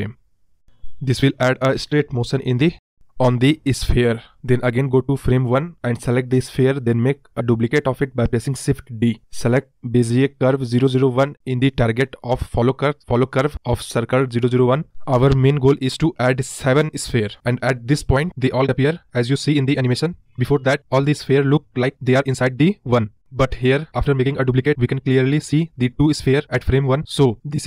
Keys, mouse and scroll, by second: 7.5 shift+d, 11.4-25.8 drag, 27.5-27.6 scroll up 1.